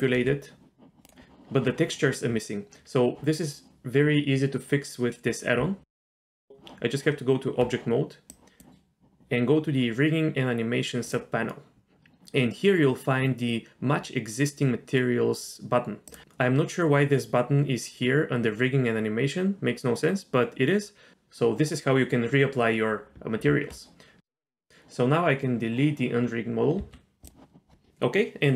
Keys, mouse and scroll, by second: 0.0 click, 0.1 r, 5.6 Tab, 8.3-9.2 drag, 11.0 click, 16.1 click, 23.5 Tab, 24.2-24.7 drag, 26.8 x.